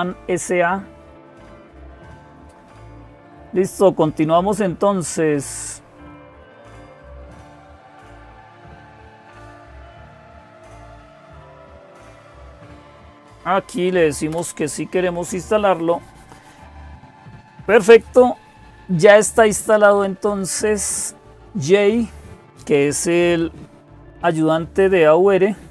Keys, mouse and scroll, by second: 0.0-25.7 typing, 0.4-9.3 scroll down 1, 9.3 click, 12.9 click, 14.1 Return.